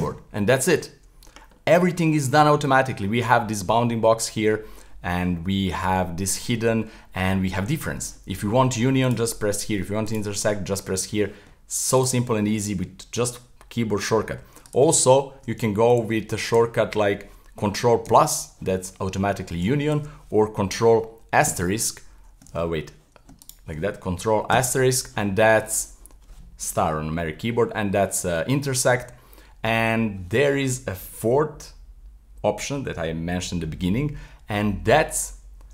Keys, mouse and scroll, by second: 1.5 scroll down 1, 1.6-5.7 middle drag, 9.0 click, 10.1 click, 10.5-12.0 middle drag, 12.0 click, 14.7 z, 14.9 z, 16.0 z, 16.5 z, 18.1 ctrl+KP_Add, 19.9 z, 21.5 ctrl+KP_Subtract, 22.5 z, 23.4 shift+right click, 24.5 ctrl+KP_Multiply, 31.1 z, 34.1-35.7 middle drag.